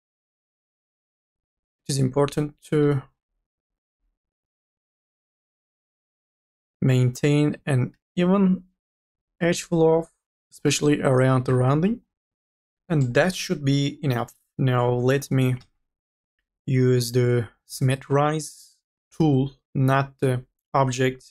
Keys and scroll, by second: 5.2 2, 6.7 e, 12.3 1, 15.2 3, 16.0 ctrl+a.